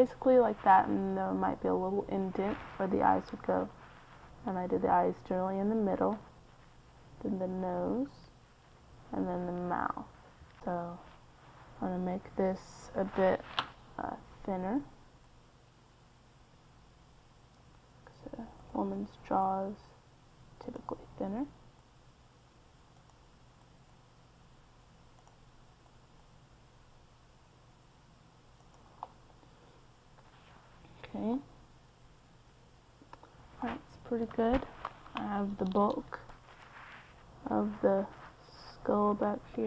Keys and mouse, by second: 0.0-11.3 typing, 0.8-2.8 drag, 12.6-14.6 drag, 17.8-19.6 right drag, 22.5-24.2 right drag, 24.7-26.0 right drag, 26.8-28.3 right drag, 28.9-30.8 right drag, 32.2-33.6 middle drag, 33.6 KP_3.